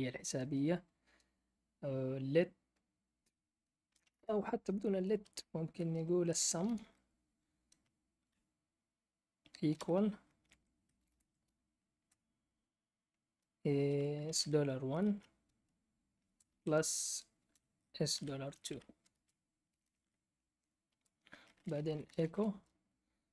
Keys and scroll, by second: 0.0-0.2 typing, 3.8 BackSpace, 3.9 BackSpace, 4.1 BackSpace, 6.2-7.2 typing, 9.4-10.9 typing, 11.9 typing, 13.9-15.0 typing, 16.2-19.7 typing, 20.8 Return, 21.5-23.3 typing.